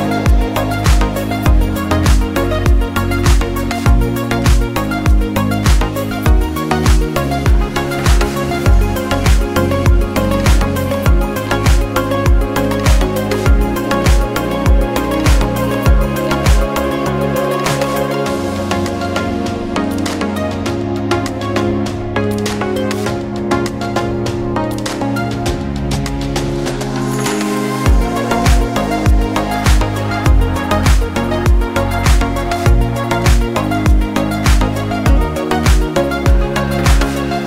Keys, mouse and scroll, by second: 4.7 scroll up 1, 5.8 click, 14.7 click, 15.0 scroll down 1, 17.2 click, 20.7 click, 23.6 click, 25.8 click, 27.4-28.0 scroll up 1, 28.6 click, 35.9 scroll up 1.